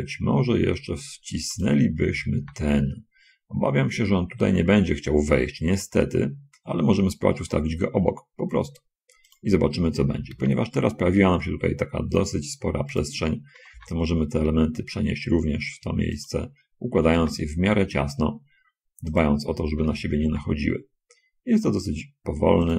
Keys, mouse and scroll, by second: 1.9 click, 2.4 l, 2.4 g, 9.6 click, 10.4 l, 10.6 g, 12.9 click, 13.9 l, 14.1 g, 16.6 click, 17.3 l, 19.5 click, 20.2 l, 20.4 g.